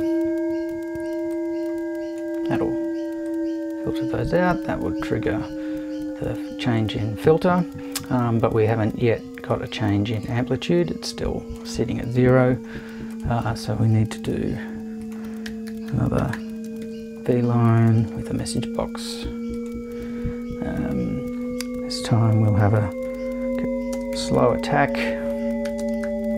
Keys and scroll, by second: 14.2 super+1, 15.2-17.3 typing, 17.9 shift+super+`, 18.0 super+2, 23.1-26.3 typing.